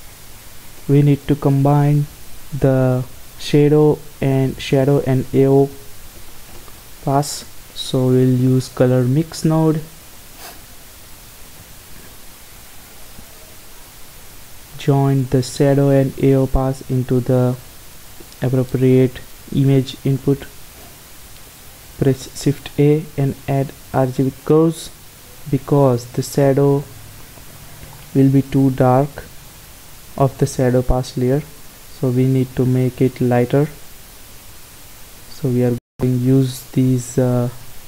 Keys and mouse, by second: 1.7 shift+a, 11.7-14.9 drag, 15.3-17.2 drag, 17.8 click, 18.6 middle click, 22.3 shift+a, 29.2-34.0 drag, 34.8-36.7 drag.